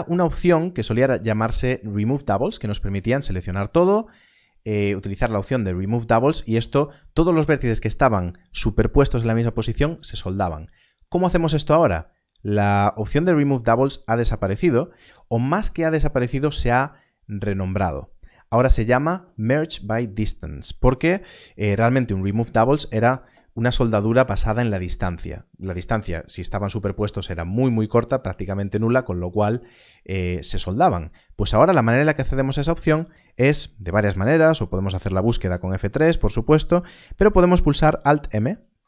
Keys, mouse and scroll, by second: 34.9 a, 35.2 F3, 35.7 Escape, 38.4 alt+m.